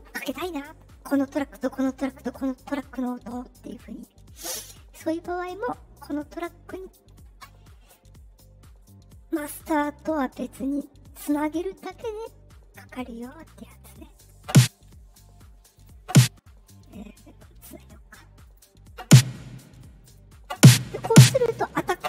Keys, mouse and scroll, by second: 11.3 click, 12.7-14.1 drag, 15.7 click, 16.8 click, 18.4 click, 19.7 click.